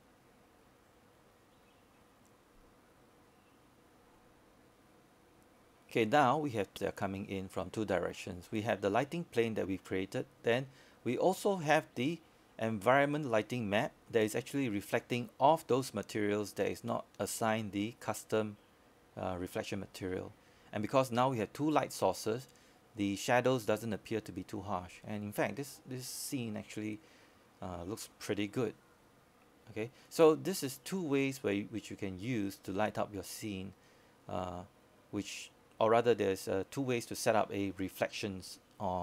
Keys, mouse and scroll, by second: 0.8-1.2 scroll up 1, 2.5-39.0 drag.